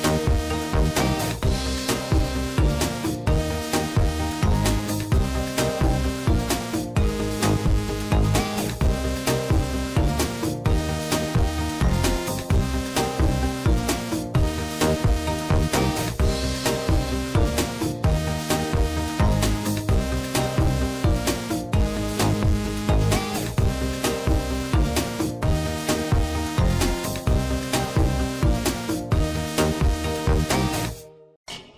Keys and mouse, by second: 0.8 shift+middle click, 2.1 ctrl+r, 5.8 click, 6.4 click, 8.3 click, 12.1 click, 14.7 click, 14.9 click, 17.4-18.9 drag, 22.5 shift+middle click, 24.1-26.3 drag, 27.5-29.8 drag, 31.1 click, 31.3-31.7 drag.